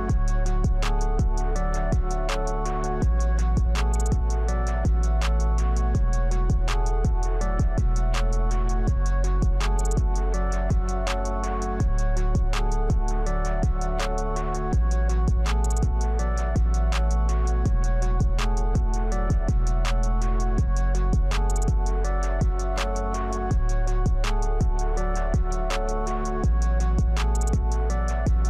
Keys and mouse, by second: 0.2 click, 0.7 click, 1.0 s, 1.8 click, 2.0 s, 3.4 click, 3.9 click, 4.3 alt+shift+click, 4.6 middle click, 4.8-6.9 typing, 8.2 e, 8.2 s, 8.7 shift+z, 9.0 shift+middle click, 9.7 KP_7, 10.4 middle click, 10.9 Tab, 11.6 KP_7, 11.9 g, 12.9 middle click, 13.5 KP_1, 14.0 s, 14.5-14.9 middle drag, 15.1 g, 15.6 middle click, 15.9 Tab, 16.2 s, 16.7 g, 17.2 e, 17.6 Tab, 17.8 middle click, 18.2 click, 18.3 Tab, 19.3 ctrl+b, 20.1 Tab, 20.5 middle click, 20.7 click, 21.0 middle click, 21.7 Tab, 21.8 middle click, 22.2 click, 22.8 s, 23.1 e, 23.8 f, 24.0 Tab, 24.1 middle click, 25.2 click, 25.3 right click, 25.8 shift+middle click, 26.2 Tab, 27.8 middle click, 28.2 Tab.